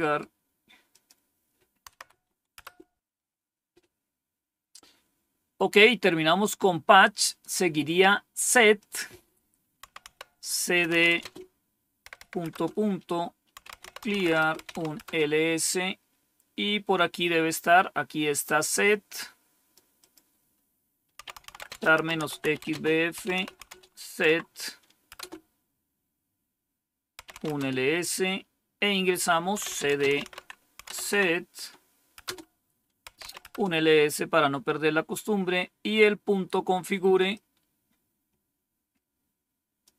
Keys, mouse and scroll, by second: 0.8 click, 1.8 Tab, 2.5 Return, 7.1 click, 8.7 click, 9.0 click, 9.5-15.0 typing, 18.7-20.0 drag, 20.9-24.0 typing, 24.1 Tab, 25.0 Return, 26.9-27.6 typing, 29.2-30.7 typing, 30.9 Tab, 32.1 Return, 32.7-33.5 typing, 37.2-39.8 drag.